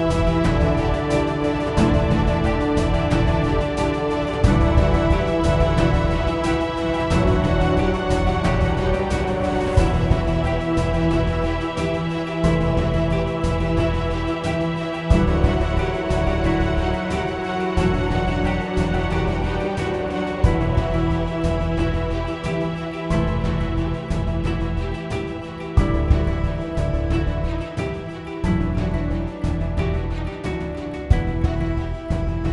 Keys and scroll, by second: 2.8-4.7 typing, 6.3-7.2 typing, 14.4 d, 15.1 d, 15.6 w, 16.1 w, 17.3-18.0 typing, 19.1-20.4 typing, 21.3 Tab, 22.3-24.0 typing, 27.8 ctrl+a, 28.1-32.2 typing.